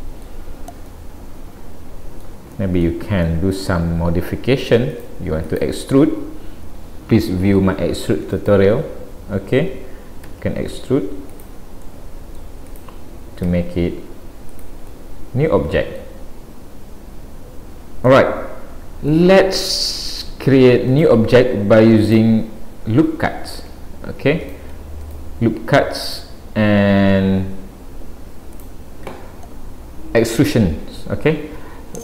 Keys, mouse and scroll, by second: 0.9 middle click, 2.5 middle click, 5.0 click, 5.5 click, 8.3 click, 10.3 e, 11.8 middle click, 12.7 click, 13.5 e, 15.0 middle click, 18.1 middle click, 20.0 click, 24.4 click.